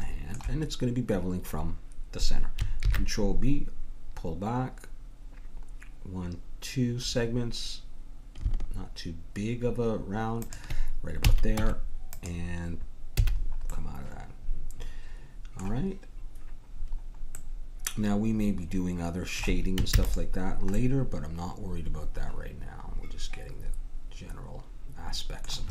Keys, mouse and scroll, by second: 2.8 ctrl+b, 11.2 a, 11.5 Tab, 13.2 a, 13.3 middle click, 15.4-16.7 middle drag, 18.4 middle click, 19.2-20.4 middle drag, 19.9 ctrl+s.